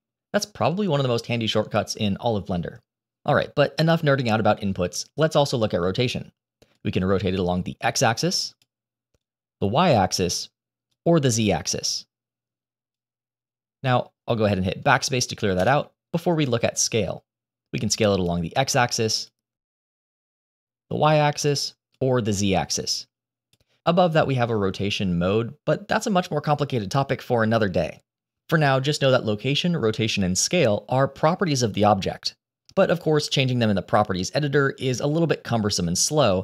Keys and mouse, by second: 6.7-8.5 drag, 9.1-10.2 drag, 10.8-12.8 drag, 15.5 BackSpace, 17.7-19.8 drag, 20.2-21.4 drag, 21.9-23.4 drag.